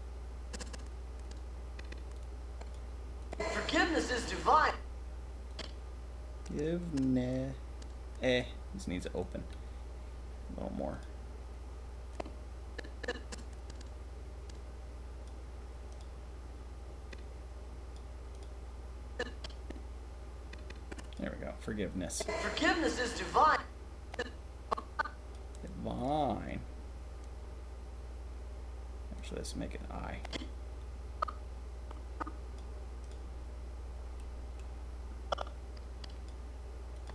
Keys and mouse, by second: 1.1 click, 1.8-2.7 drag, 3.2 click, 4.5 click, 5.5-6.8 drag, 11.0-12.1 middle drag, 15.2-17.1 middle drag, 17.9 middle click, 18.4 middle click, 19.5-21.1 drag, 22.2 click, 23.3 click, 24.1-25.3 drag, 30.2 drag, 30.7-32.5 drag, 33.0 click, 34.1 click, 35.3-36.2 drag, 37.0 drag.